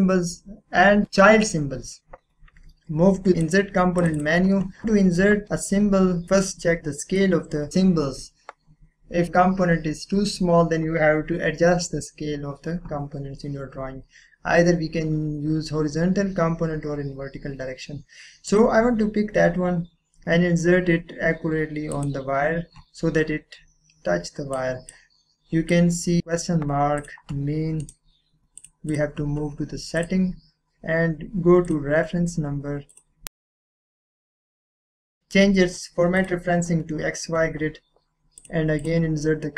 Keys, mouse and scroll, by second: 2.0 click, 6.8-8.5 drag, 9.3 click, 18.5 click, 19.3 scroll up 1, 21.2 scroll up 1, 21.9 click, 24.5-27.0 drag, 27.8 right click, 28.6 click, 36.2 click, 37.8-38.4 typing, 38.4 click.